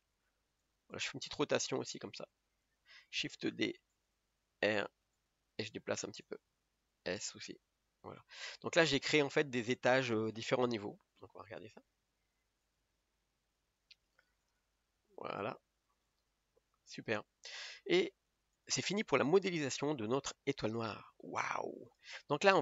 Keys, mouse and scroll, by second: 0.2 g, 1.0 r, 2.1 g, 3.7 shift+d, 4.5 r, 5.5 g, 8.6 Tab, 9.0 scroll up 2, 12.8 click, 14.4 click, 15.3-17.4 middle drag, 17.4-17.8 scroll down 2, 17.8 middle click, 18.7 click.